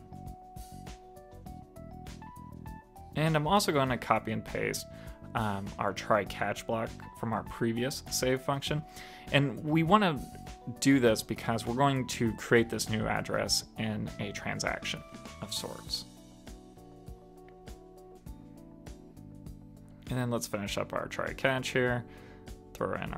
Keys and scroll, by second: 4.1 shift+super+Left, 4.5 super+c, 7.4 super+v, 8.6 super+Right, 19.3 super+s.